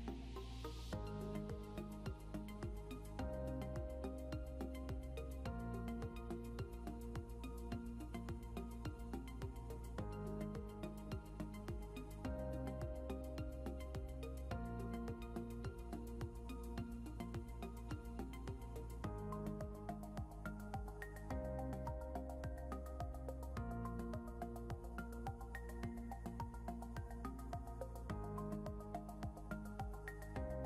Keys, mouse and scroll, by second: 2.6 scroll up 1, 8.0 scroll down 1, 9.0 scroll up 1, 17.6-17.9 shift+scroll down 2, 19.4 scroll up 1, 23.6 scroll down 1, 26.0 right click, 27.7 scroll down 1, 28.8 ctrl+s.